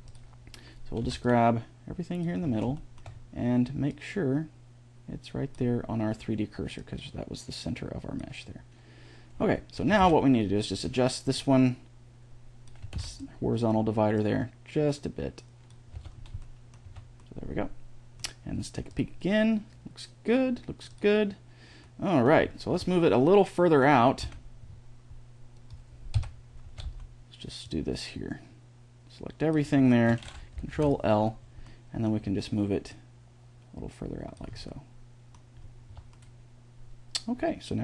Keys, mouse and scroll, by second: 0.8 b, 3.7-5.4 drag, 6.6-8.4 drag, 9.2-11.2 middle drag, 9.6 a, 9.8 b, 11.2-13.2 drag, 12.6 a, 12.8 b, 14.0-15.5 drag, 15.8 Tab, 16.7 a, 21.6-23.7 middle drag, 22.5 Tab, 24.0 c, 26.0 KP_1, 26.4 a, 26.6 b, 30.6 ctrl+l, 32.7 middle click, 34.5-35.7 middle drag, 35.7 Tab.